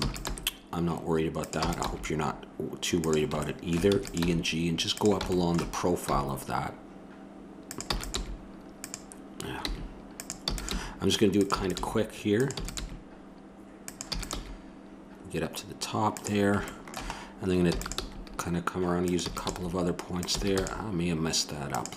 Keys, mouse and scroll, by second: 0.0 e, 0.3 g, 1.6 e, 3.0 g, 4.0 e, 4.2 g, 6.1 g, 7.9 e, 8.1 g, 10.4-12.8 typing, 14.0 e, 14.3 g, 17.7 e, 17.8 g, 19.2 e, 19.5 g, 20.3 e, 20.6 g.